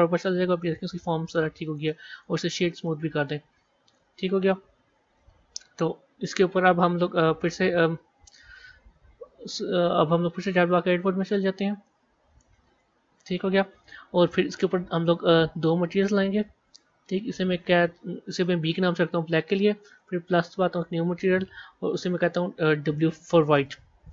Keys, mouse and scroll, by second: 0.5-1.5 middle drag, 1.5 right click, 2.7-3.7 middle drag, 3.7 KP_1, 4.4 scroll down 1, 6.8 z, 10.5 b, 11.7-13.1 middle drag, 13.1 KP_1, 14.8 click, 15.8 click, 20.9 click, 21.2 click, 21.8 click, 22.0 click.